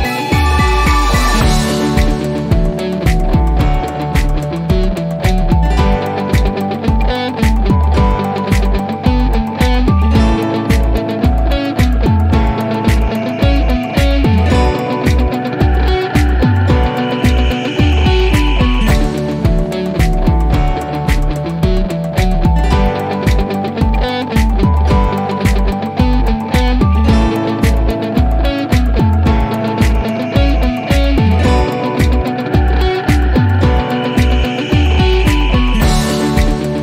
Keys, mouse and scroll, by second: 2.0 click, 4.3 click, 5.3-6.3 middle drag, 9.4-9.8 scroll down 1, 10.5-12.0 alt+middle drag, 15.1 click, 16.8-18.3 scroll up 1, 33.6 click, 35.6 click.